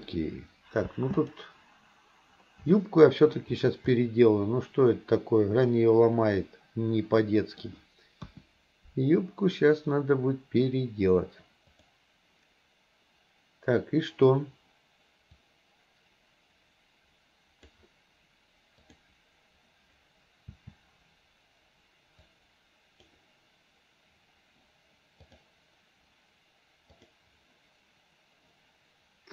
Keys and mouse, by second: 1.0 space, 1.2 click, 2.8-3.4 middle drag, 4.0-7.7 middle drag, 8.3 KP_1, 11.8 click, 15.5-17.9 drag, 18.8 click, 20.6 a, 22.3 click, 25.3 click, 27.0 click.